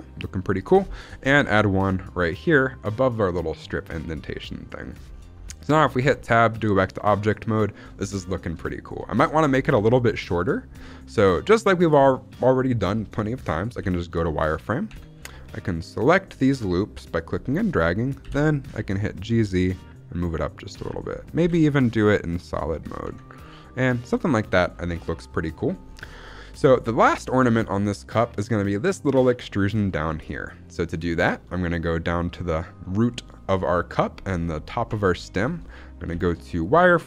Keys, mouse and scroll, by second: 0.5 click, 0.8 shift+middle click, 1.2 ctrl+r, 4.7 click, 5.0-5.9 scroll down 3, 5.9 Tab, 6.2-6.9 shift+middle drag, 6.9-7.7 scroll up 1, 7.7-8.4 scroll up 1, 8.5-9.3 shift+middle drag, 9.4-9.8 scroll up 2, 9.8-11.3 shift+middle drag, 13.7 z, 14.8 Tab, 15.7 click, 18.1 g, 18.6 z, 20.1 click, 20.6 z, 21.3 g, 22.8 click, 23.2 Tab, 23.3-23.8 scroll down 2, 24.1-24.4 shift+middle drag, 24.4-25.7 scroll down 2, 25.7-26.1 scroll down 2, 26.1 middle click, 26.3-27.1 scroll up 1, 27.1-28.8 scroll up 3, 28.8 scroll up 1, 29.8 shift+middle drag, 29.8-30.4 scroll up 3, 30.4 shift+middle drag, 30.7-32.5 scroll up 4, 34.8 Tab, 35.1 shift+middle click, 35.4-35.8 scroll up 2, 36.0 z.